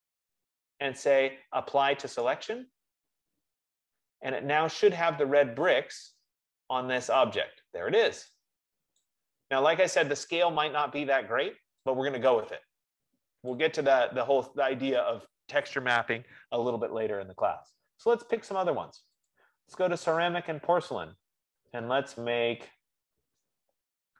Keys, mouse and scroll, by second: 0.0 right click, 2.6 click, 9.5 click, 11.1 F15, 13.8 click, 19.6 click, 22.4-23.5 scroll.